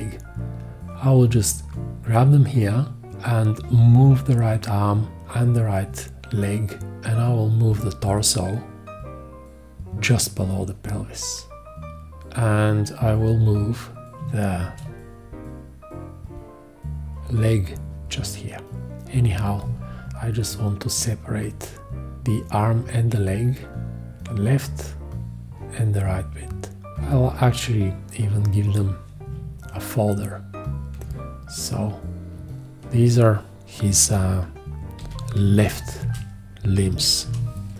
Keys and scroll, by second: 34.8-36.9 typing, 37.2 Return.